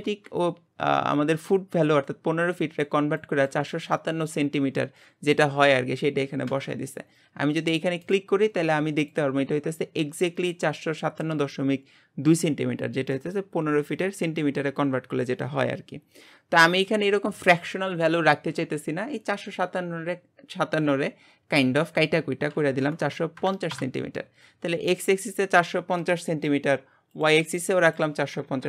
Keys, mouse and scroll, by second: 8.0 click, 27.1 click, 27.9 click.